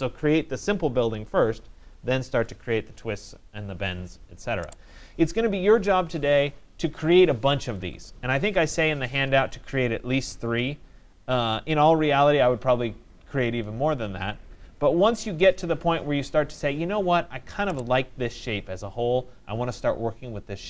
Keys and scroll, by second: 5.0 Return, 6.8 Escape.